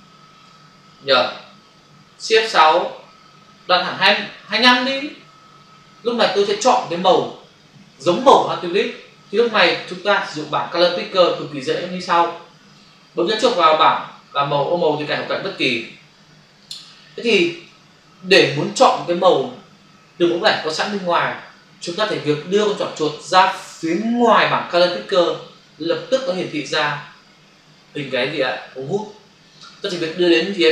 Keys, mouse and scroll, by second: 2.3 shift+F6, 4.4 typing, 5.1 Return, 15.4 click, 16.5 click.